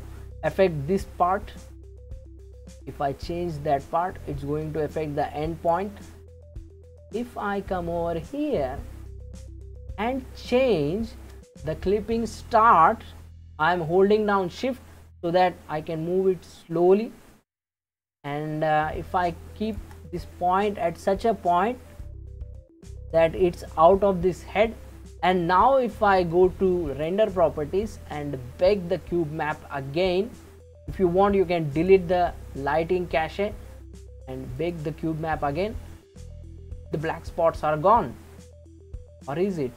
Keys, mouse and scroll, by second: 1.3-2.5 scroll down 2, 2.5-5.5 drag, 6.3-10.7 scroll up 15, 10.7-13.8 shift+middle drag, 15.2-18.2 shift+drag, 26.9 click, 31.7-37.6 drag, 38.8-39.7 middle drag.